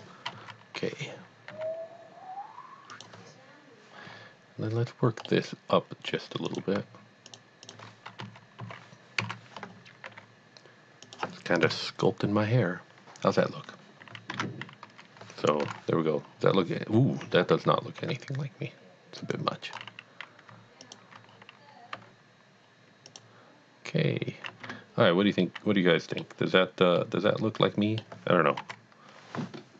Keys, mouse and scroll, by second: 0.3 KP_1, 1.5 g, 3.0 click, 5.3 middle click, 5.7 middle click, 6.4 click, 7.3 shift+click, 7.7 shift+double click, 8.2 KP_1, 8.7 KP_3, 9.2 KP_1, 10.1 g, 11.0 click, 14.3 Tab, 15.6 KP_1, 16.3-16.7 scroll down 1, 17.3 Tab, 18.0 g, 19.2 click, 19.7 scroll up 1, 20.8 alt+click, 21.4-21.9 scroll down 1, 21.9 g, 23.1 click, 24.7 Tab, 25.5 middle click, 25.8 middle click, 26.5 scroll down 1, 27.0 middle click, 27.5 middle click, 28.2 middle click, 28.6 KP_3.